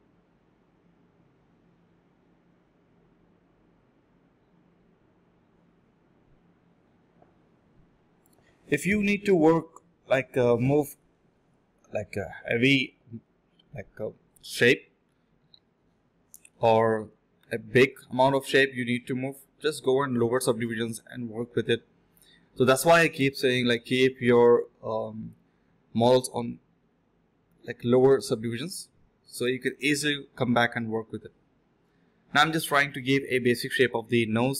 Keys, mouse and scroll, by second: 0.3 shift+click, 0.3 shift+double click, 0.4 shift+click, 1.3 shift+click, 1.3 shift+double click, 6.1-6.4 typing, 13.3 alt+click, 14.2 alt+click, 15.1 scroll down 1, 15.3 middle click, 15.8 scroll up 1, 16.2 middle click, 17.0 scroll up 1, 17.1 middle click, 18.2-19.2 typing, 20.2 alt+click, 20.5 alt+click, 20.6 alt+click, 21.4-21.9 typing, 25.2 alt+click, 25.5 alt+click, 25.7-27.2 typing, 29.1 scroll down 1, 29.2 middle click, 29.9 scroll up 1, 30.1 middle click, 31.2 typing, 32.9 typing.